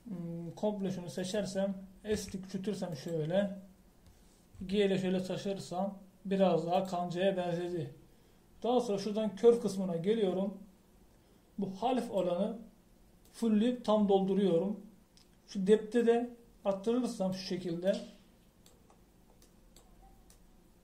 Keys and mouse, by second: 0.0-1.4 drag, 3.1 s, 3.7 click, 5.5 g, 10.5-14.8 drag, 17.0-18.8 drag, 18.8 middle click.